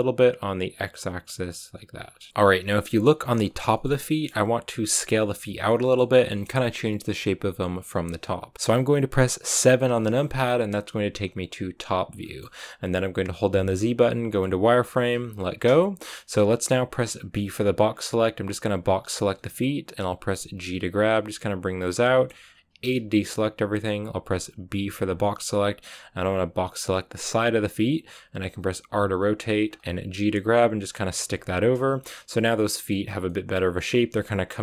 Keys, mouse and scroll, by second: 1.9-2.3 scroll down 6, 2.3-3.7 middle drag, 3.7 scroll down 1, 3.8 scroll up 1, 4.0-8.5 middle drag, 8.5-9.6 scroll up 1, 9.6 KP_7, 12.1 shift+middle click, 12.4-15.3 scroll up 3, 15.3 z, 16.0 shift+middle click, 16.4-19.2 scroll up 2, 19.2 b, 20.1 g, 21.9 shift+middle click, 22.4-22.7 scroll up 1, 22.7 a, 27.3 b, 28.8 r, 29.8 g, 31.0 r, 31.2 g, 33.0 z, 33.2 middle click, 33.4 scroll down 3, 33.6 middle click, 33.9 a.